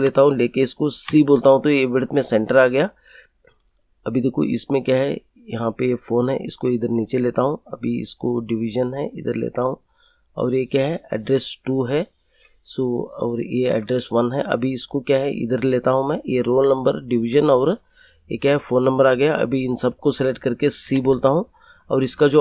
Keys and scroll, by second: 1.0 c, 20.8 c.